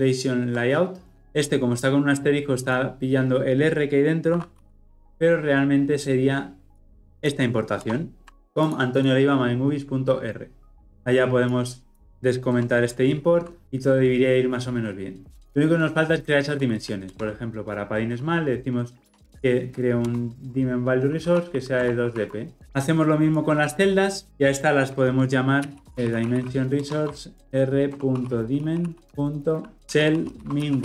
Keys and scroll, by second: 7.8 alt+Return, 13.6 ctrl+alt+o, 17.0 alt+Return, 25.6 ctrl+x, 26.8 Return.